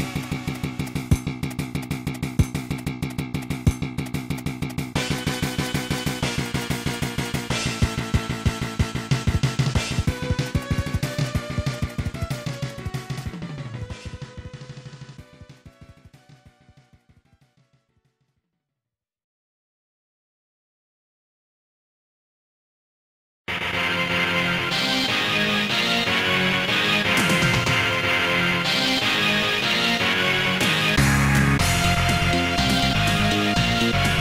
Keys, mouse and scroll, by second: 0.4 scroll up 2, 2.5 scroll down 2, 8.4 click, 10.8 click, 11.1 click, 11.2 click, 11.8 click, 12.7 s, 13.5 click, 14.5 click, 15.4 click, 17.7 click, 18.5 s, 20.2 click, 20.6 ctrl+z, 21.2 click, 21.9 click, 22.5 s, 23.2 scroll up 2, 27.8-28.3 scroll up 2, 28.5 scroll up 1, 31.6 click, 32.0 ctrl+z, 32.8 s, 33.9 Return.